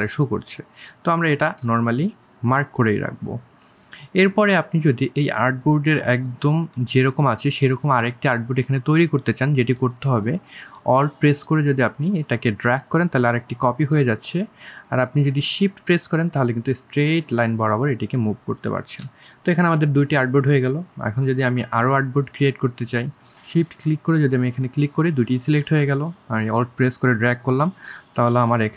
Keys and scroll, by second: 5.0 space.